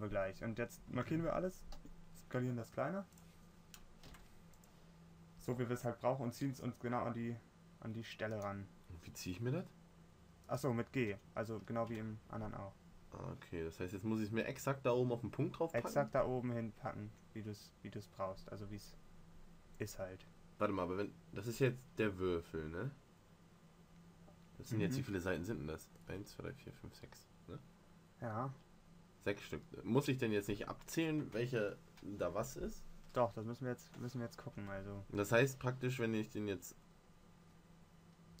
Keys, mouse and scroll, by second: 2.0 s, 4.4 s, 5.9 g, 11.3 g.